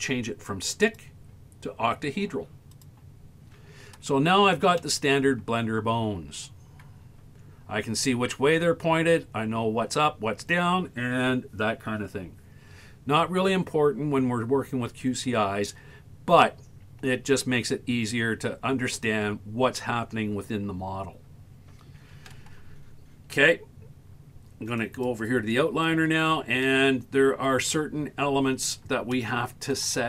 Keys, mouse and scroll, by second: 0.8 click, 4.2-4.6 scroll up 1, 4.8-5.2 shift+middle drag, 5.5-5.9 scroll up 4, 9.0-9.8 scroll down 7, 11.8 scroll down 2, 24.8 click, 28.4 scroll down 3, 29.2-29.8 shift+middle drag.